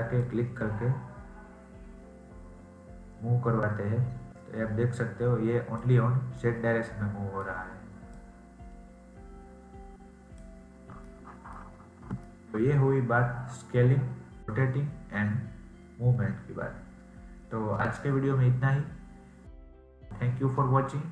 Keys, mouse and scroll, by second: 0.1 click, 6.0 scroll down 2, 6.3-8.1 middle drag, 8.1 click, 10.7 scroll down 2, 11.0-14.4 middle drag.